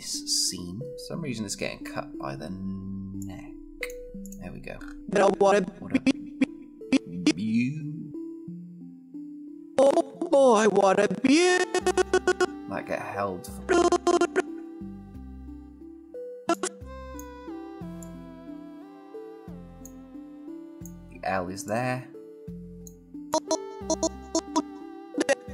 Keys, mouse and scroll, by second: 0.9-2.3 scroll up 1, 3.3-3.9 click, 4.6-5.0 scroll down 1, 5.0-9.5 click, 12.5 s, 13.6-16.1 click.